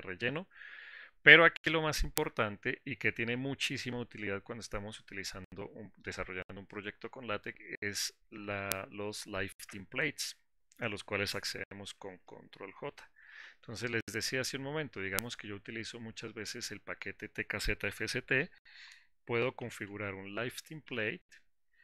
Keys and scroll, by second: 13.6 ctrl+j.